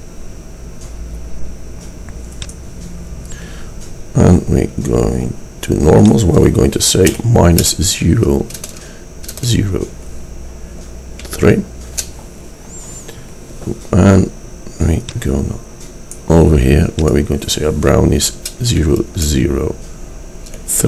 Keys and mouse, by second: 0.4-2.5 middle drag, 4.3-6.1 middle drag, 8.0 middle click, 15.1-17.0 drag, 17.2 click.